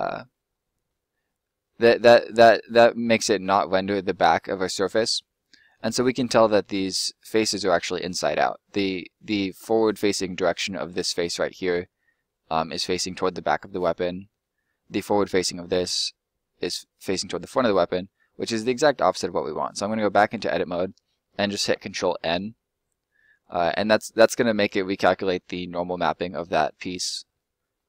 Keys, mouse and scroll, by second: 5.9 middle click, 12.2 middle click, 17.2 middle click, 20.0 middle click, 21.1 ctrl+middle click.